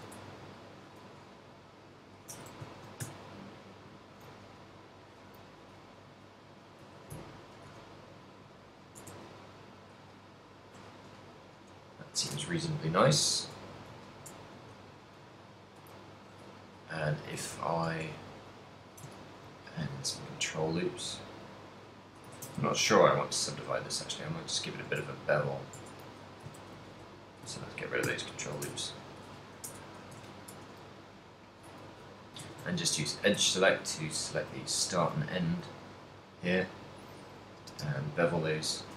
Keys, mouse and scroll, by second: 0.3 a, 0.6 alt+right click, 1.0 g, 2.2 click, 2.4 a, 3.2 ctrl+click, 4.7-7.7 typing, 5.5 click, 6.0 click, 6.6 click, 7.2 ctrl+middle click, 8.2 middle click, 9.1 Tab, 9.4 middle click, 12.7 middle click, 13.4 Tab, 14.1 shift+middle click, 14.4 Tab, 14.9 ctrl+1, 16.0 ctrl+z, 17.5 ctrl+middle click, 18.1 Tab, 18.7 middle click, 19.3 ctrl+r, 22.3 click, 22.3 a, 22.7 ctrl+r, 24.9 click, 25.2 Tab, 25.2 middle click, 25.9 Tab, 26.2 a, 26.7 ctrl+z, 26.8 ctrl+z, 27.2 ctrl+z, 27.7 ctrl+z, 28.3 ctrl+z, 28.7 Tab, 29.7 Tab, 30.2 a, 30.6 w, 31.9 a, 32.2 alt+shift+right click, 32.7 z, 33.0 alt+shift+right click, 33.4 z, 33.8 middle click, 34.7 ctrl+middle click, 36.0 shift+right click, 36.6 shift+right click, 37.1 middle click, 37.7 space.